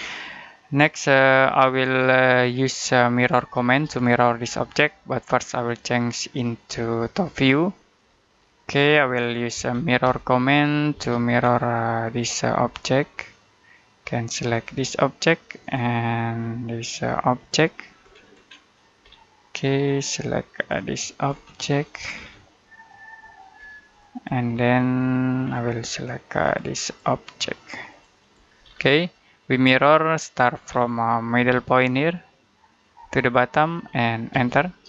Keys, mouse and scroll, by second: 0.2 middle click, 1.5 middle click, 5.5 click, 7.9-8.4 scroll down 1, 8.4 middle click, 9.4 typing, 10.8 space, 11.2-11.9 scroll up 1, 11.9 click, 12.5 middle click, 14.4 click, 16.0 middle click, 17.2 click, 17.9-18.4 scroll up 1, 18.9-19.7 scroll down 1, 19.7 click, 21.1-21.7 scroll up 1, 21.7 click, 22.0-22.5 scroll down 1, 22.5 middle click, 23.4 scroll up 1, 23.8 click, 24.4 scroll down 1, 24.6 middle click, 25.3 scroll up 1, 26.3 click, 28.5-29.0 scroll down 1, 29.0 middle click, 30.5 scroll down 1, 30.8 middle click, 31.2 space, 32.7 click, 34.2 space.